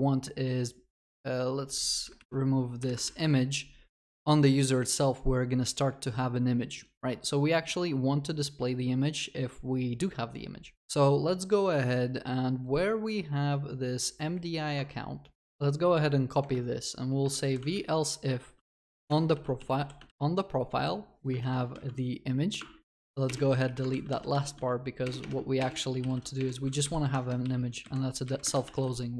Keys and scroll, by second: 2.0 Delete, 3.0 ctrl+s, 15.4 ctrl+d, 19.2 Return, 19.6 Return, 21.5 ctrl+s, 25.0 ctrl+s, 25.0 ctrl+BackSpace.